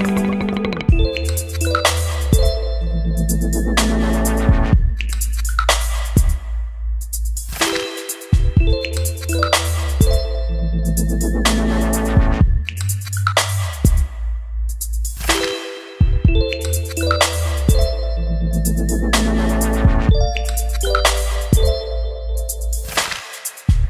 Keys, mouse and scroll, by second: 0.8 click, 1.7 ctrl+x, 1.9 click, 2.2 Return, 2.5 click, 2.8 Return, 2.9 ctrl+v, 3.4 ctrl+click, 3.6 ctrl+space, 3.8 Down, 4.0 Return, 5.2 click, 5.6 Return, 6.1-15.2 typing, 15.3 Return, 15.7-16.8 middle drag, 16.6-21.7 typing, 21.7 Return, 22.8-23.8 typing.